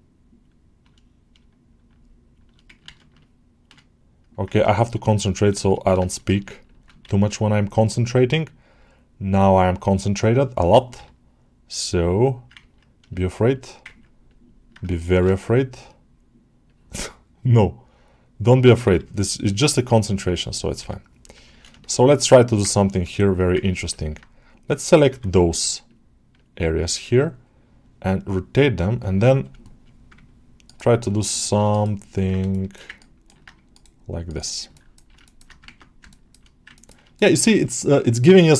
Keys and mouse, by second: 1.8 shift+click, 5.0 alt+shift+middle click, 5.9 alt+shift+middle click, 6.3 alt+middle click, 6.5 alt+middle click, 8.0-11.7 drag, 12.0 alt+middle click, 12.4 ctrl+middle click, 13.0 alt+shift+middle click, 13.4 alt+shift+middle click, 13.7 ctrl+middle click, 14.1 middle click, 15.6 click, 19.6 click, 21.1 click, 21.4-22.5 ctrl+alt+shift+middle drag, 22.5 ctrl+alt+middle click, 23.0 alt+shift+middle click, 23.5 ctrl+alt+middle click, 23.8 alt+shift+middle click, 31.0 ctrl+right click, 31.6 ctrl+right click, 32.3 alt+shift+middle click, 32.8 ctrl+alt+right click, 33.6 ctrl+right click, 34.1 ctrl+right click, 34.6 ctrl+alt+middle click, 35.6 ctrl+Tab, 35.9 shift+middle click, 36.6 ctrl+alt+middle click, 37.0 alt+shift+middle click.